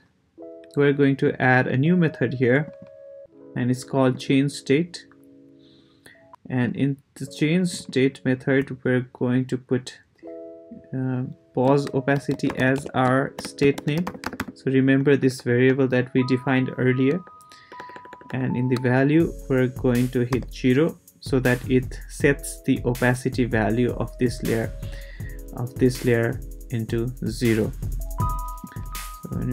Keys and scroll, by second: 11.9-14.9 typing, 15.0 Right, 17.2 shift+Right, 20.3 0.